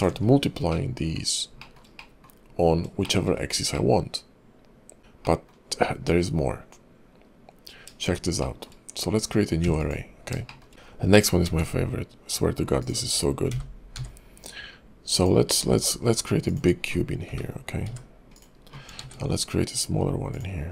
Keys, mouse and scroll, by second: 0.2-0.8 scroll down 6, 0.7 middle click, 1.5 scroll down 1, 1.6 shift+middle click, 2.0 middle click, 3.0 middle click, 3.2 shift+scroll up 3, 3.7 middle click, 5.2 middle click, 7.1-7.9 scroll up 1, 7.9-8.2 scroll up 1, 8.4 shift+middle click, 9.6 x, 10.4 shift+middle click, 10.7 scroll up 1, 10.8-11.3 scroll down 3, 11.4 shift+a, 12.8 click, 13.5 g, 15.6 s, 17.2 g, 19.0 shift+a, 20.6-20.7 scroll down 3.